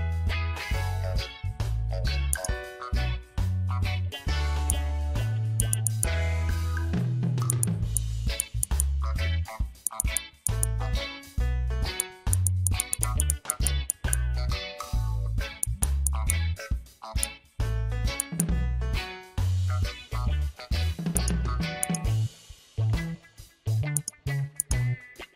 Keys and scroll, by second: 5.5 space, 7.4 space, 9.8 space, 12.6 space, 15.8 space.